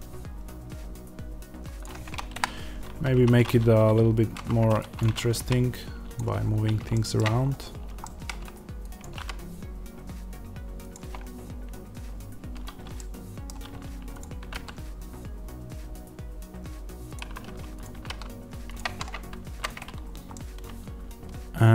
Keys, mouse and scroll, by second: 3.0 1, 4.2 z, 4.9 click, 5.3 g, 6.8-8.9 shift+middle drag, 8.9 click, 9.1 g, 10.8 click, 12.8 middle click, 14.1 click, 14.3-17.0 middle drag, 14.3 g, 17.0 click, 17.8 g, 18.6 click, 18.8 Tab, 19.1 scroll down 1, 19.2 z, 19.9-20.2 scroll up 1, 20.2-21.7 middle drag.